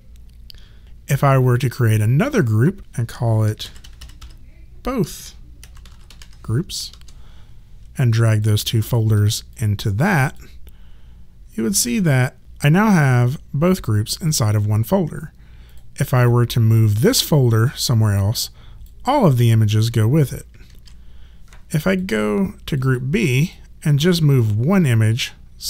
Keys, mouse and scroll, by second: 0.8 click, 1.6 right click, 2.8 click, 3.4-6.6 typing, 6.9 Return, 8.3 click, 8.9 shift+click, 11.8 click, 20.7 ctrl+z, 21.7 click.